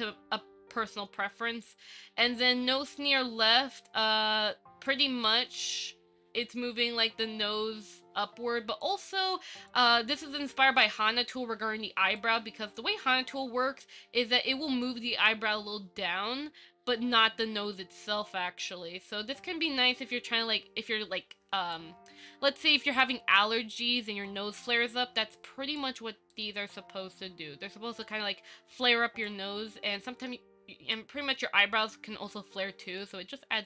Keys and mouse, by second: 3.8-5.1 drag, 7.0-9.0 drag, 12.4-15.0 drag, 18.9-21.9 drag, 25.6 click, 26.5-29.4 drag, 31.1-33.6 drag.